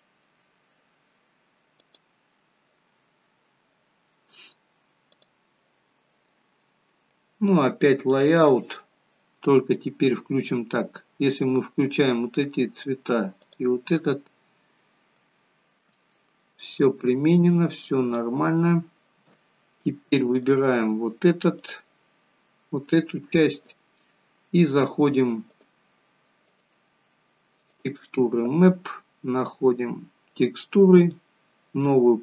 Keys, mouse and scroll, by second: 8.2 click, 11.4 click, 12.4-13.5 scroll down 1, 13.5 click, 13.5-14.1 scroll down 1, 14.1-14.5 scroll down 2, 15.2 scroll down 4, 15.3 shift+middle click, 16.0 scroll up 2, 16.7 middle click, 18.0-18.5 scroll up 2, 18.5-19.7 scroll down 1, 19.7-20.4 scroll down 2, 20.4 click, 22.0 click, 23.1 shift+middle click, 25.7 click, 26.5 click, 31.0 click.